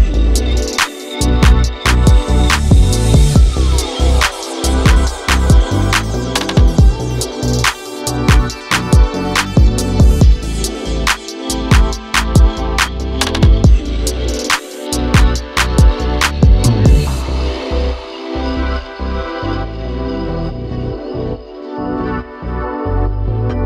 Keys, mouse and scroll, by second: 1.2 click, 2.3-2.7 scroll down 3, 2.7 click, 3.9 click, 4.2 KP_7, 4.7-5.1 scroll down 2, 5.1 shift+d, 6.1 click, 7.1-7.6 middle drag, 7.6 KP_0, 8.1-9.9 scroll up 4, 10.6 click, 12.4 ctrl+j, 13.9-14.9 drag, 15.2 click, 18.9 click, 20.6 click, 22.0-23.6 drag.